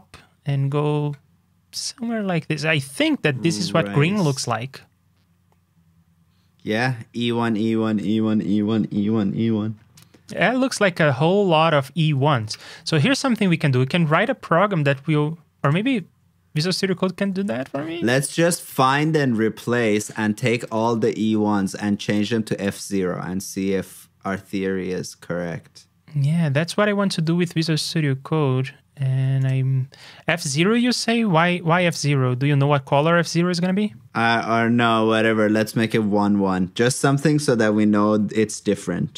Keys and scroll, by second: 18.6 shift+super+l, 22.6 super+f, 28.8 super+b.